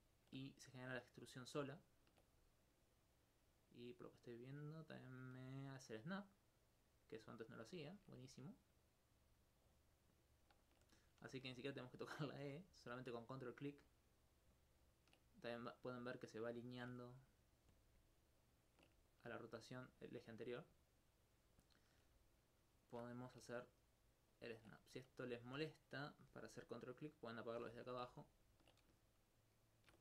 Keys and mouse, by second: 0.0 alt+click, 0.8 ctrl+click, 1.9 ctrl+click, 2.5 alt+click, 3.3 alt+click, 7.9 ctrl+alt+click, 13.3 ctrl+click, 13.9 ctrl+click, 14.5 ctrl+click, 16.7 alt+click, 17.3 ctrl+click, 18.5 ctrl+click, 19.1 alt+click, 20.0 alt+click, 20.7 alt+click, 21.8 alt+click, 22.6 right click, 22.9 shift+right click, 23.7 ctrl+click, 24.3 ctrl+click, 24.8 alt+click, 27.9 alt+click, 29.5 shift+right click, 29.8 shift+right click.